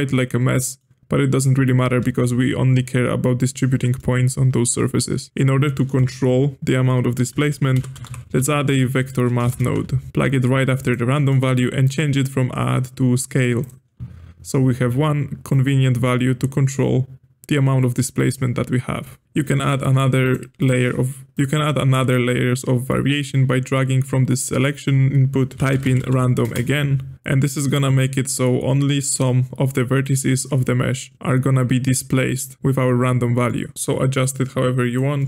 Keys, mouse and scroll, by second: 3.3 alt+shift+click, 3.9-5.3 middle drag, 5.9 space, 11.1-11.8 middle drag, 11.8-14.8 drag, 15.5-18.5 drag, 19.2 click, 19.6 g, 20.6-25.5 drag, 28.0-29.1 middle drag, 29.1-32.6 drag, 32.6-33.7 middle drag, 33.7-35.1 drag, 35.1 middle click.